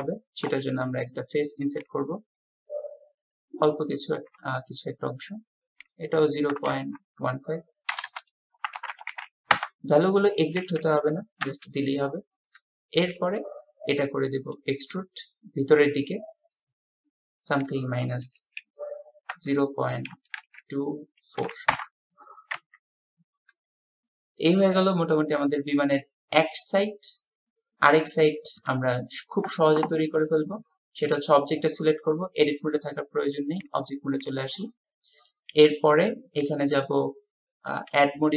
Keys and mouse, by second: 0.7 click, 4.6 shift+click, 7.3-11.1 drag, 8.1 BackSpace, 11.5 Return, 13.6 click, 16.6 click, 17.6-22.6 drag, 22.6 Tab, 23.5-28.7 drag, 25.6 typing.